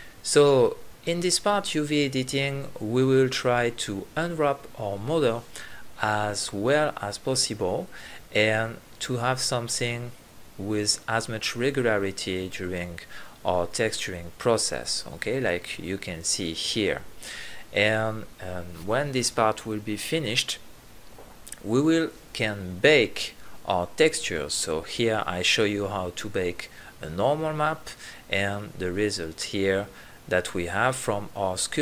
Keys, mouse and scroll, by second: 0.9 click, 1.8 right click, 2.6 s, 4.3 s, 6.7 g, 8.8 click, 9.3 right click, 9.5 l, 9.9 r, 11.0-11.4 drag, 14.5-18.8 typing, 15.4 drag, 15.8 click, 16.3 click, 17.0 right click, 17.2 click, 18.1 click, 18.7 click, 19.3 click, 19.5 right click, 19.8 l, 20.2 s, 20.9 g.